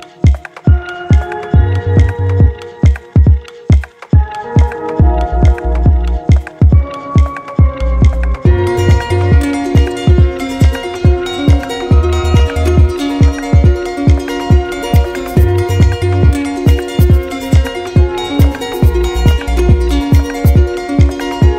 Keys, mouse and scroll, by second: 0.8 click, 1.4 shift+click, 2.6 alt+click, 3.6 click, 8.3 click, 10.3 shift+click, 12.4 click, 13.9 alt+click, 16.5 click, 17.6 alt+click.